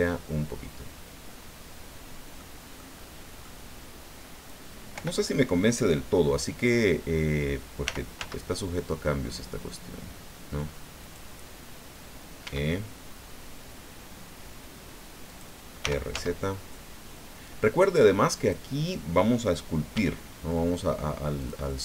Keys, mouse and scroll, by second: 2.8 click, 3.6 scroll up 2, 4.9 o, 7.8 r, 8.1 z, 11.0 click, 12.4 e, 15.3 click, 15.8 r, 16.1 z, 18.3 click, 19.9 e, 21.4-21.8 drag, 21.7-21.8 middle drag.